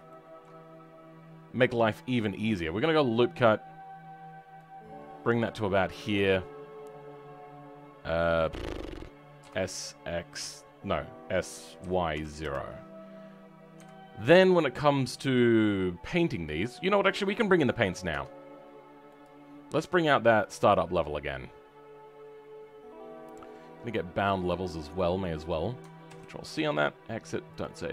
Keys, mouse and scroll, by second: 0.0 shift+middle click, 2.4 click, 16.4-16.8 scroll down 5, 16.8 middle click, 18.0 Tab.